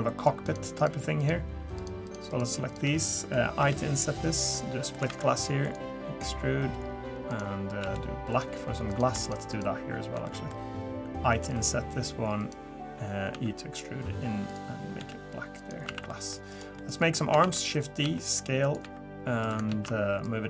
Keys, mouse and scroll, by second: 0.2 shift+click, 0.4 shift+click, 0.8 shift+click, 1.2 shift+click, 1.8 click, 2.0 shift+click, 2.3 click, 2.7 shift+click, 2.9 middle click, 3.6 i, 4.5 middle click, 5.1 alt+e, 7.8 g, 8.9 click, 9.2 shift+click, 9.5 shift+click, 10.2 middle click, 11.3 i, 13.3 e, 15.0 g, 15.9 a, 16.1 middle click, 16.5 click, 16.8 middle click, 17.4 shift+d, 18.0 s, 18.8 e, 19.7 ctrl+z, 20.2 click.